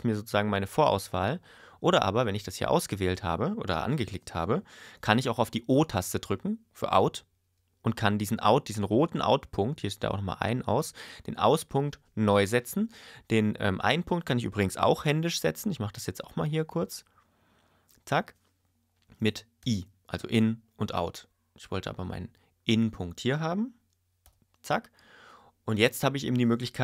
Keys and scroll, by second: 19.6 i.